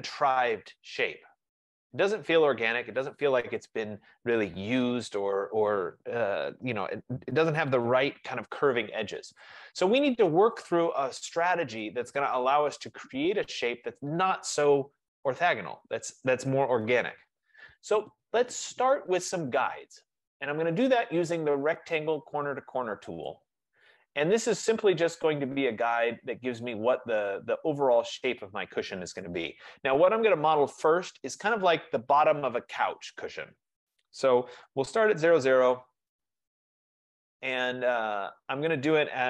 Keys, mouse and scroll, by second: 9.5 click, 11.9 click, 17.2 BackSpace, 21.1 F15, 23.4 click, 28.5 click, 34.7-35.2 typing, 37.2 BackSpace, 37.5 Return.